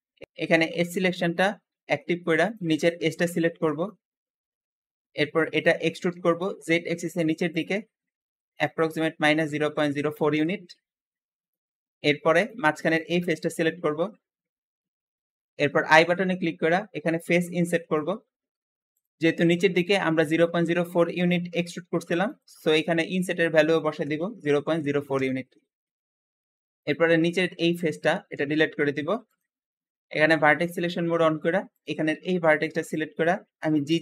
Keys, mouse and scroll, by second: 0.2 click, 1.0-2.3 shift+middle drag, 2.3 shift+click, 2.7-3.9 shift+middle drag, 3.9 scroll up 2, 4.4-5.4 shift+middle drag, 5.4-6.1 typing, 8.4 click, 9.1-10.1 typing, 10.1 click, 10.2 Return, 11.0-11.3 scroll down 4, 11.3 middle click, 12.2 click, 13.1 shift+middle click, 13.6 scroll up 1, 16.0 i, 16.1 i, 19.1 Escape, 22.1-24.5 drag, 23.8-24.7 typing, 25.0 Return, 25.1 Return, 26.7 click, 28.2 x, 30.5-31.7 drag, 32.0 g, 33.7 g, 33.8 g.